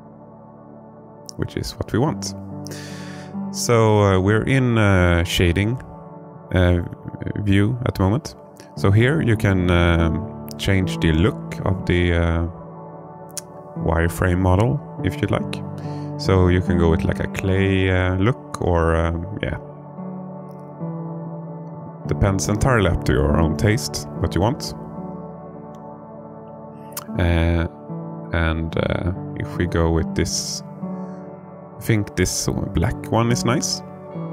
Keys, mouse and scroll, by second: 0.1 alt+middle click, 6.1-11.4 drag, 13.3-18.0 drag, 18.5-20.2 alt+middle drag, 22.2 drag, 22.9-24.7 alt+middle drag, 29.1-31.3 drag, 32.0-34.2 alt+middle drag.